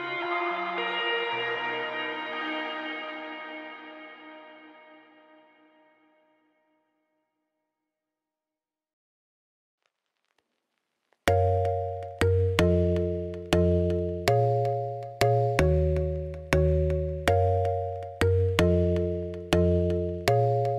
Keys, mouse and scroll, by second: 0.0-2.1 typing, 2.8-4.0 drag, 4.4-5.6 drag, 6.2 g, 8.4-9.6 drag, 9.7 ctrl+s, 9.9-12.9 drag, 13.5-14.2 scroll down 2, 14.2-15.4 scroll up 2, 15.4 click, 15.7 click, 16.1 h, 17.1 alt+h, 17.2 x, 17.8 ctrl+s, 18.4 shift+s, 18.8 shift+a, 19.9 g.